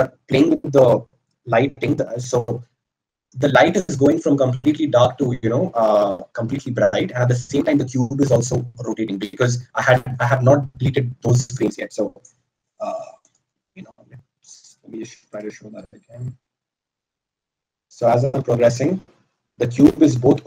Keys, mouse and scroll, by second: 15.7 click.